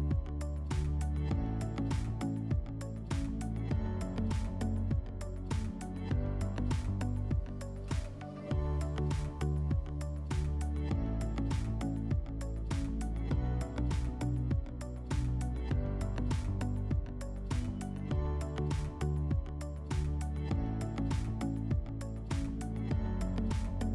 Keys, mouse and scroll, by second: 2.0 click, 3.6 click, 4.6 right click, 4.8 w, 6.8 click, 8.4 alt+w, 9.9 alt+middle click, 11.1 middle click, 12.5 middle click, 13.8 click, 17.0 click, 18.3 click, 20.3 click, 22.3-23.9 drag.